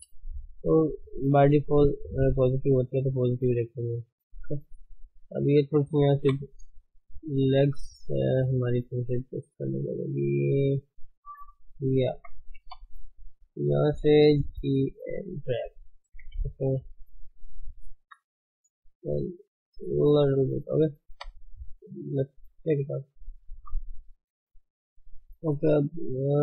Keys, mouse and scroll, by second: 0.0-0.5 scroll up 3, 0.5-1.0 scroll down 3, 1.0-5.1 shift+middle drag, 5.1 Tab, 6.2 KP_1, 7.0 shift+z, 7.7 click, 8.2 shift+z, 8.6 Tab, 9.1 click, 10.1-10.8 scroll down 1, 12.1 shift+h, 12.6 Tab, 13.1 click, 14.5 g, 15.5-16.2 scroll up 2, 16.3 Tab, 17.0 ctrl+Tab, 17.1 scroll down 5, 18.0 g, 18.2 f, 18.6 scroll up 4, 19.3-21.3 drag, 21.3 ctrl+Tab, 22.1 alt+h, 23.1 click, 25.0 click, 25.3 Tab, 26.3 Tab.